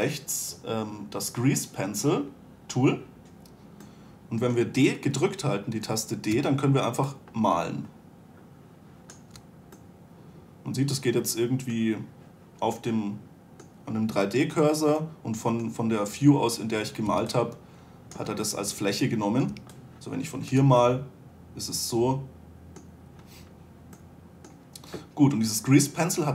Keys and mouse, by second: 0.0 n, 4.2-6.7 middle drag, 6.7 d, 7.2-9.8 d, 10.4-11.0 drag, 13.5 drag, 17.5 d, 18.6 d, 19.9 d, 20.9 d.